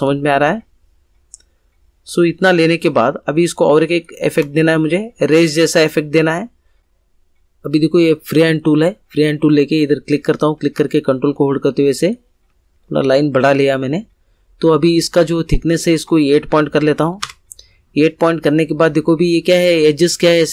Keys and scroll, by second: 6.8 Delete, 16.6 8, 17.2 Return.